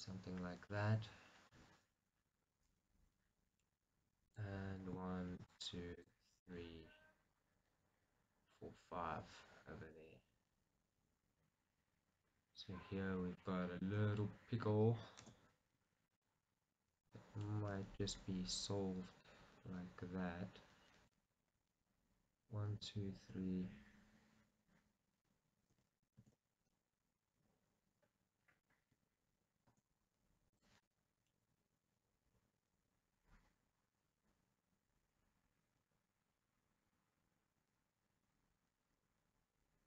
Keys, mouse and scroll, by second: 4.5 click, 5.4 shift+click, 6.5-18.9 middle drag, 15.2 ctrl+r, 17.2 right click, 26.2 ctrl+z, 26.8 middle click, 29.7 ctrl+r, 31.0 right click, 31.4 middle click.